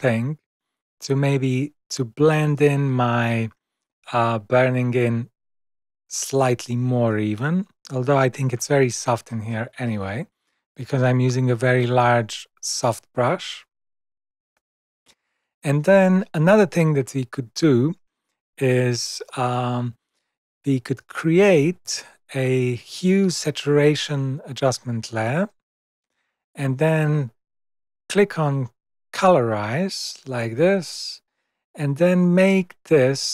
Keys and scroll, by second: 18.4 super+0.